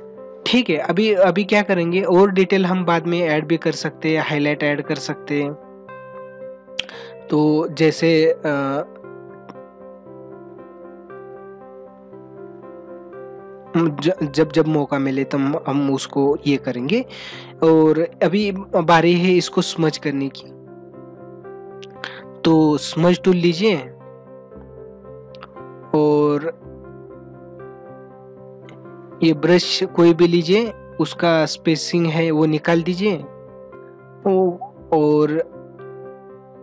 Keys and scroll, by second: 21.5 ctrl+=.